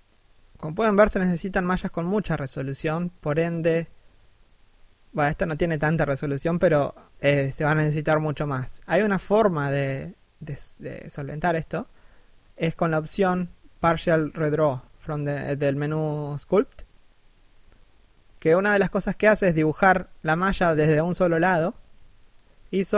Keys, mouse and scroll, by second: 1.8 middle click, 2.3 scroll down 1, 2.5 middle click, 3.1-3.5 scroll up 1, 3.8 middle click, 4.7 middle click, 5.2 z, 6.2 middle click, 8.0 middle click, 11.8 middle click, 15.6 middle click.